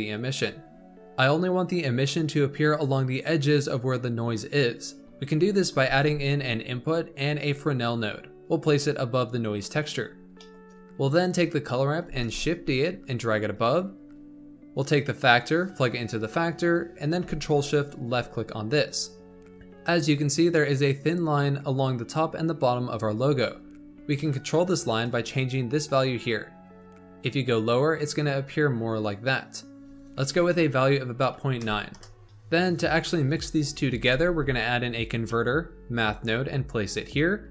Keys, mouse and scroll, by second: 0.3-0.8 scroll down 4, 5.8 shift+a, 10.3-11.0 middle drag, 11.0 click, 12.0 shift+d, 14.7 click, 17.7 ctrl+shift+click, 19.1-19.5 scroll up 5, 23.0-23.4 scroll up 7, 24.1 middle click, 25.0-28.0 drag, 29.9-32.2 drag, 32.2-33.4 middle drag, 33.4 scroll up 4, 34.0 shift+a.